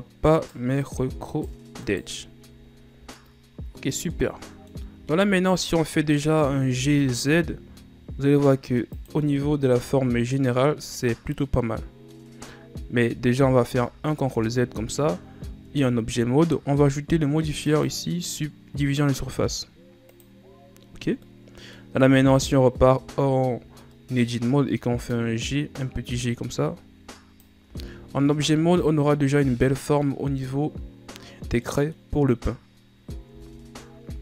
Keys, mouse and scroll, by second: 0.5 shift+right click, 1.0 shift+right click, 1.5 shift+right click, 1.9 shift+right click, 2.4-3.0 scroll down 4, 4.3 middle click, 4.9-5.3 scroll down 2, 5.3-5.7 shift+scroll up 1, 5.7 middle click, 6.2 shift+scroll up 2, 6.8 g, 9.4 middle click, 9.9 Tab, 10.3 scroll down 1, 10.5-12.8 middle drag, 12.8-13.9 scroll up 1, 13.9 ctrl+z, 14.5 ctrl+z, 15.8 Tab, 17.8-21.0 drag, 21.3 middle click, 22.1 Tab, 22.7 middle click, 23.2 shift+scroll up 2, 24.1-25.3 middle drag, 25.3-27.8 drag, 27.8 Tab, 28.4-31.4 middle drag, 31.8-33.1 middle drag, 33.1 scroll up 1, 33.4 Tab, 34.0-34.2 middle drag.